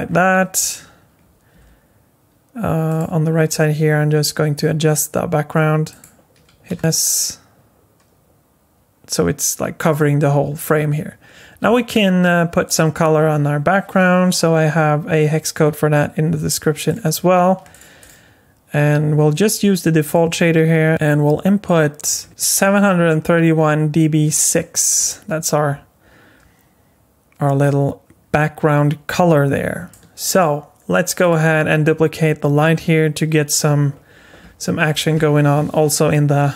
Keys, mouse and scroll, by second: 0.0-0.6 scroll down 6, 1.5 g, 3.9 scroll up 2, 4.7 g, 6.7 s, 6.8 s, 8.7 s, 12.6 click, 16.9 click, 17.7 click, 18.0 click, 20.0 click, 29.9 middle click, 31.2 click, 33.1 KP_3, 36.1-36.5 scroll up 1.